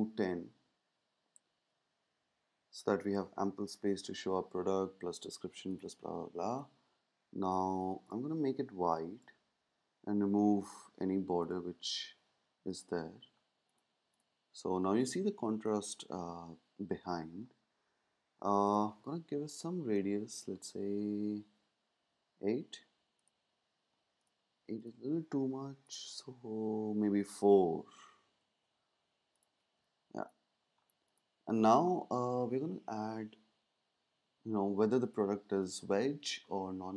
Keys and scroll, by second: 0.0-1.6 typing, 3.4 shift+Up, 19.5 shift+Up, 20.3 Down, 20.3 Down, 21.5 Up, 26.6 Down, 26.7 Down.